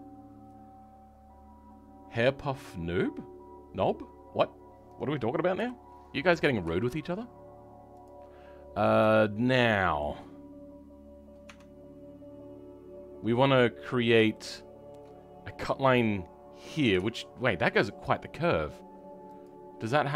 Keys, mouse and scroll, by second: 5.5 KP_3, 6.7 shift+middle click, 7.9 click, 8.4 scroll up 2, 9.1 shift+middle click, 11.4 Tab, 14.2 shift+middle click.